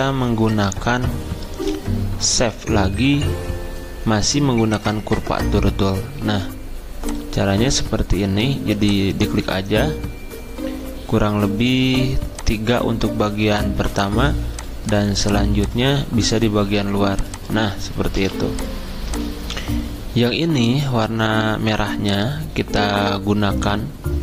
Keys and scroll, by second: 18.2 v.